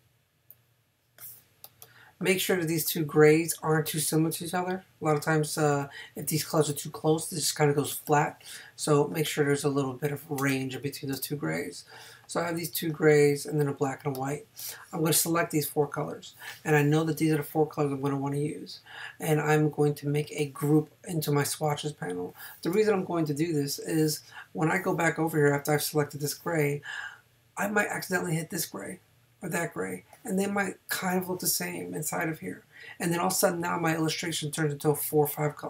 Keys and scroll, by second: 7.9 space, 10.4 space.